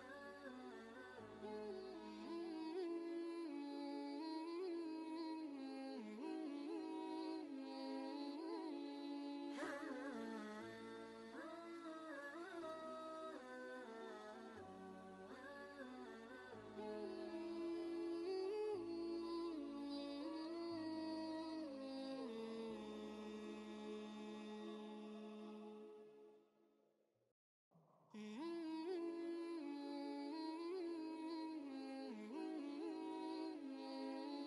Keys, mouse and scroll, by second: 5.1 scroll down 1, 5.1 typing, 8.8 scroll up 1, 12.1 scroll down 1, 12.9 click, 14.7-15.3 scroll down 1, 17.7 typing, 20.1-20.7 scroll up 1, 20.1 typing, 21.8 click, 22.9 alt+Tab, 24.5 ctrl+v, 24.8 ctrl+space, 25.0-28.1 ctrl+drag, 30.1 ctrl+space, 30.4 ctrl+click, 30.7 ctrl+space, 31.1 click, 31.6 ctrl+space, 31.7 ctrl+click, 32.0 typing, 32.2 ctrl+space.